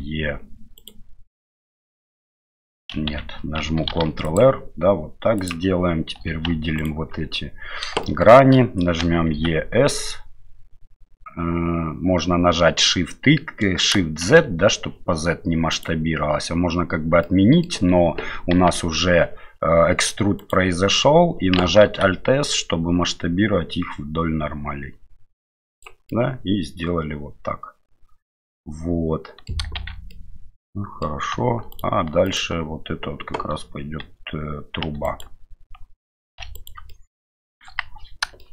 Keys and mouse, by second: 3.1 ctrl+z, 3.9 ctrl+r, 6.2 3, 6.8 alt+right click, 8.0 middle click, 9.0 e, 17.3 middle click, 18.6 g, 21.8 alt+s, 26.1-29.5 middle drag, 29.8 shift+z, 30.1 middle click, 31.7 alt+right click, 32.3 alt+right click, 34.0 3, 36.3 2, 36.9 middle click, 37.7 KP_1, 38.4 shift+middle click.